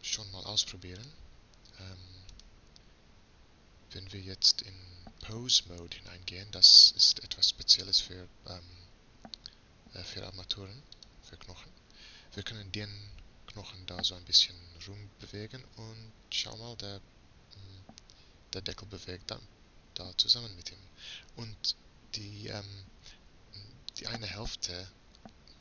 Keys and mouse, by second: 0.8 middle click, 1.8-4.2 right drag, 5.2-9.0 drag, 10.1-14.5 drag, 14.5 g.